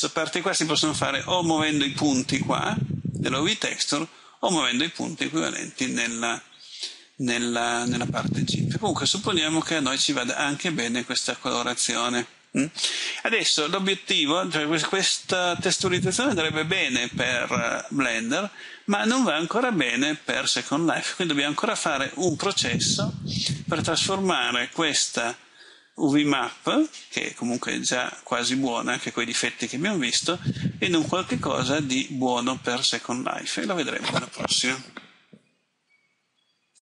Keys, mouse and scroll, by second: 25.1 scroll down 1, 29.5 middle click, 36.7 click.